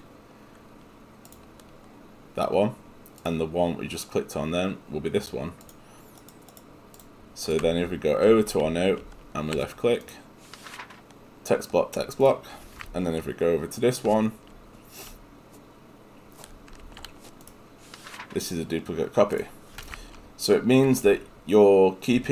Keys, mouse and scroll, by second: 3.3 click.